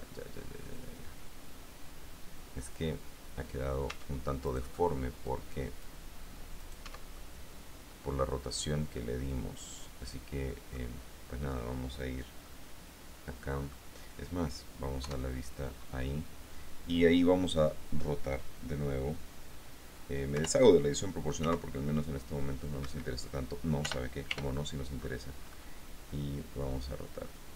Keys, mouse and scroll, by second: 4.1 Tab, 4.7 right click, 5.5 click, 6.8 middle click, 7.1 Tab, 7.3-9.2 scroll down 1, 9.2-11.1 drag, 11.7 scroll up 1, 11.8 click, 12.7-14.3 middle drag, 15.2 KP_1, 20.5 o, 21.6 r, 23.0 Escape, 24.0 d, 25.2-26.5 scroll up 1.